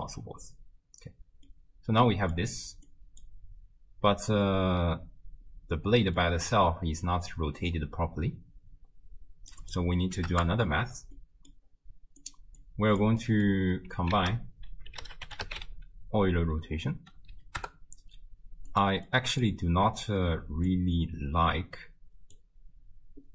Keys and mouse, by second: 1.5 middle click, 2.9 click, 6.2 middle click, 7.0-9.5 drag, 9.7 click, 11.2 click, 12.2 click, 12.7 click, 13.2 click, 13.2 right click, 14.2 ctrl+a, 17.3 Down, 19.1 click, 20.7-22.4 drag.